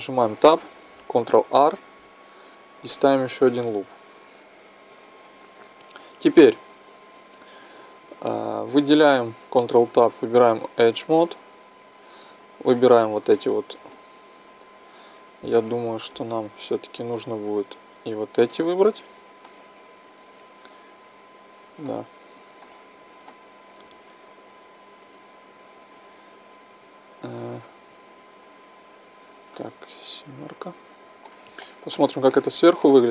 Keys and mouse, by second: 1.4 ctrl+r, 4.9-9.2 middle drag, 9.2 ctrl+Tab, 11.8-15.2 right drag, 13.9 click, 14.9 click, 15.2 middle click, 16.1-17.9 middle drag, 17.9-19.6 right drag, 18.6 click, 19.6 middle click, 20.4-23.2 right drag, 22.4 click, 23.2-24.5 middle drag, 24.5 click, 24.5-27.2 right drag, 26.0-27.2 drag, 27.2 middle click, 27.4 middle click, 30.0 KP_7.